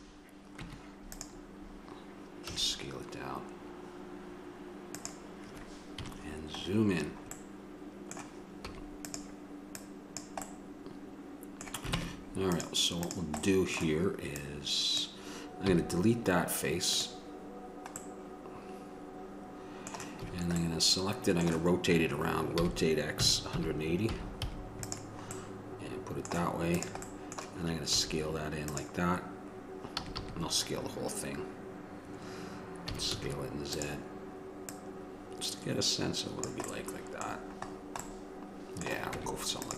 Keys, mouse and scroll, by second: 0.7 Tab, 2.7 s, 6.2 KP_Decimal, 8.8 s, 10.3-12.2 drag, 12.2 ctrl+Tab, 13.2-17.3 drag, 18.5 click, 20.4 a, 26.9-28.9 drag, 30.1 a, 30.4 a, 33.1 s, 36.6 click, 37.0-39.4 middle drag, 39.4 Tab.